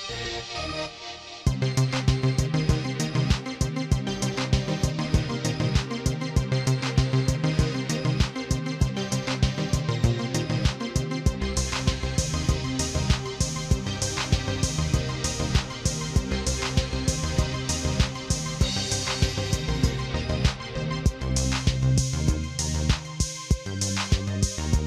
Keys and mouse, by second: 0.1 click, 0.5 click, 1.1 click, 2.3 click, 3.2-5.5 drag, 6.5 click, 7.7 click, 9.8 click, 11.9 click, 12.5 click, 14.5 click, 16.4 click, 17.2 click, 19.5 click, 20.9 click, 22.1 click, 23.6 click.